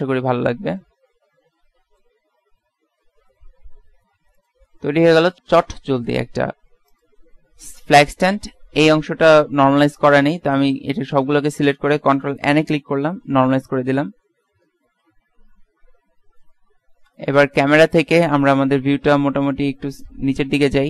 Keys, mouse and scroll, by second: 2.4 s, 4.7 Tab, 9.2 middle click, 10.0 middle click, 10.4 Tab, 11.3 a, 11.7 a, 12.8 ctrl+n, 13.4 Tab, 14.0 middle click, 15.5 KP_3, 16.1 KP_1, 17.2 KP_0, 19.2 shift+f.